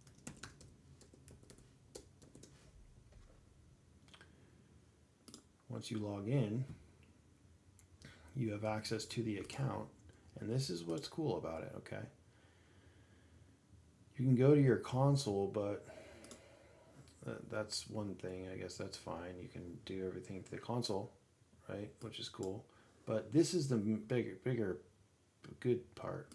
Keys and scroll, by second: 7.2 alt+a, 17.0 alt+a, 18.3 alt+a, 18.8 alt+a.